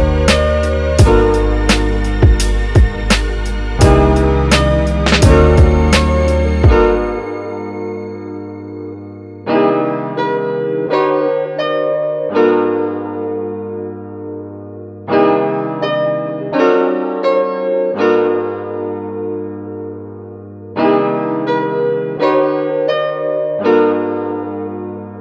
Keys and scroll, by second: 19.2 space, 23.6 super+z.